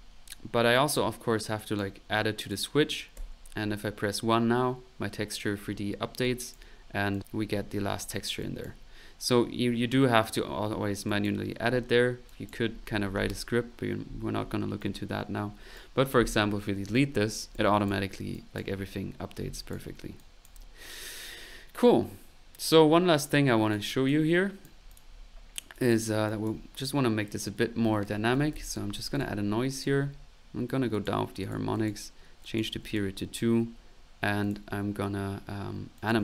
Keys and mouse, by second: 0.7-1.8 drag, 2.0-3.1 typing, 2.4 click, 5.6 middle click, 6.2 click, 7.1 click, 8.4 click, 11.0 click, 12.2 click, 14.8-15.8 right drag, 17.5 Delete, 17.5 click, 18.3 click, 19.5 click, 19.7 1, 20.1 click, 22.5 middle click, 23.2 right click, 24.0 click, 24.2 right click, 24.4 click, 24.4 typing, 25.2 middle click, 25.7 click, 26.2 click, 27.2 middle click, 27.8-29.0 typing, 29.1 click, 29.8 click, 30.9 click, 31.4 click, 32.4 click, 34.4 click, 35.9 click.